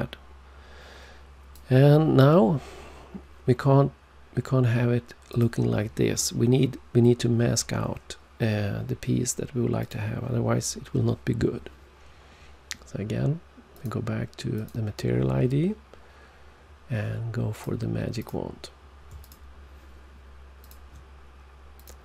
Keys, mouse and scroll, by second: 5.2 click, 9.7 click, 13.7 click, 14.5 click, 17.5 click, 18.1 click, 19.1 shift+click, 20.5 shift+click, 21.7 click.